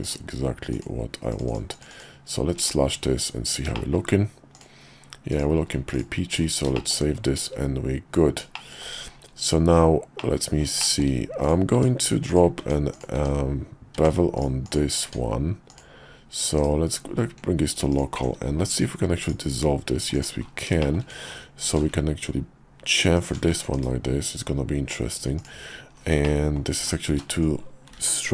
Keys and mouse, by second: 1.9 click, 2.9 `, 3.7 shift+click, 4.5 click, 5.3 click, 5.5 q, 6.7 shift+middle click, 8.5 shift+click, 8.7 shift+middle click, 10.2 middle click, 10.8 shift+middle click, 11.4 click, 11.7 Tab, 12.3 click, 12.6 Tab, 12.9 click, 13.1 Tab, 13.9 Tab, 14.3 click, 15.2 Tab, 15.7 click, 16.5 /, 17.9 alt+click, 18.5 x, 20.1 click, 20.8 shift+click, 21.6 ctrl+b, 23.5 Tab, 23.7 /, 25.4 click, 26.2 middle click, 26.8 ctrl+z, 27.1 ctrl+z, 28.0 ctrl+z.